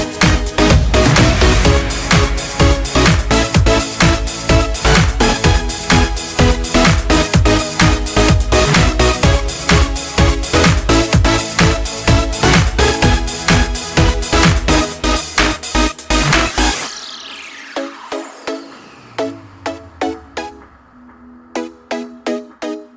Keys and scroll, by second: 19.4 ctrl+z.